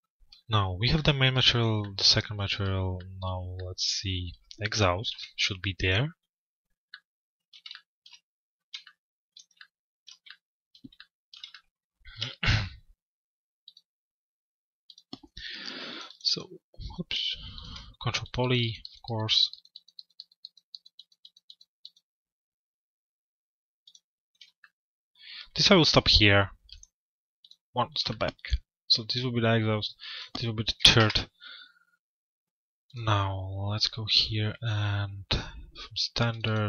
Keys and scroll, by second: 4.6 p, 30.6 Return.